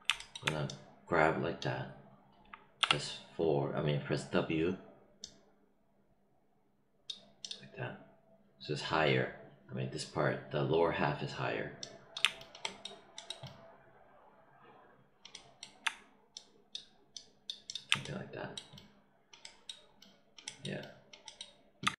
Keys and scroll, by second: 2.7 w.